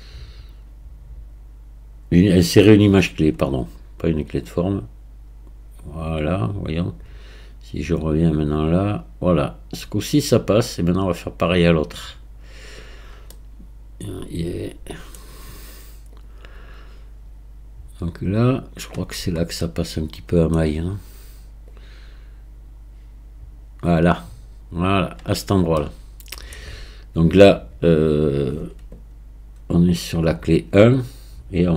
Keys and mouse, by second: 4.5-12.7 drag, 13.4-15.2 middle drag, 16.2-18.8 drag, 19.7-20.6 middle drag, 21.7-25.0 drag, 25.9-27.8 middle drag, 30.2 click.